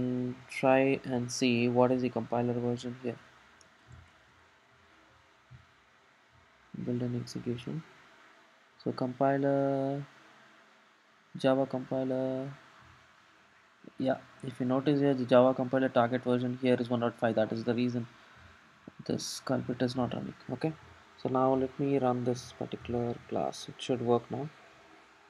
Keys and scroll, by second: 19.3 alt+super+,.